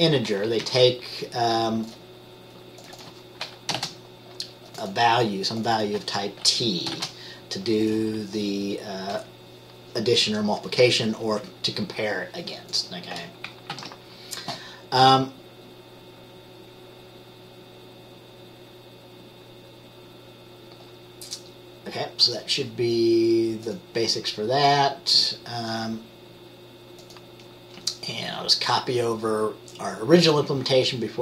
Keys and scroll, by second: 0.4 Left, 0.8 Up, 3.9 t, 7.1 t, 13.9 ctrl+s.